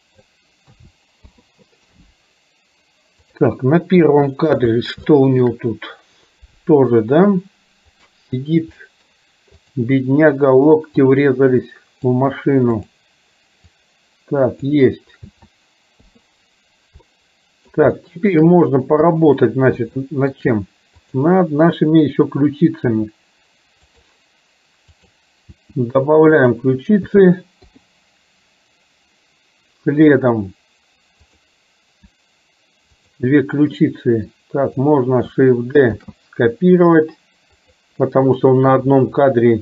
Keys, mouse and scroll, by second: 0.9 a, 1.5 i, 3.4 click, 4.2 shift+middle click, 5.2 shift+middle click, 8.9 middle click, 11.1-12.2 drag, 12.7 click, 13.9 click, 15.5 a, 16.1 i, 17.1 middle click, 18.0 shift+middle click, 19.1 KP_1, 20.1 shift+middle click, 21.1 click, 23.0 r, 25.1 click, 25.7 r, 27.2 a, 27.7 i, 30.2 click, 33.0 shift+click, 34.4 click, 36.1 shift+d.